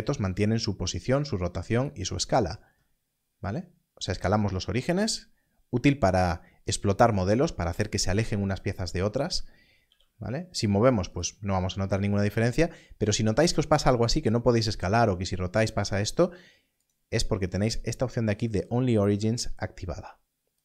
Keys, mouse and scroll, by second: 1.7 right click, 2.6 s, 6.0 s, 6.1 right click, 9.8 g, 11.1 right click, 12.2 s, 13.4 right click, 15.8 right click, 16.8 click.